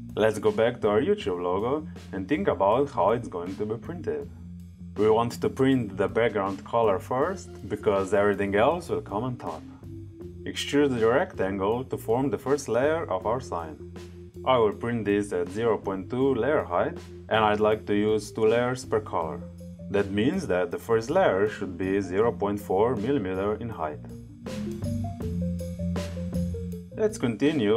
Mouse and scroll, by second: 0.5 click, 8.5-9.8 drag, 25.2 click.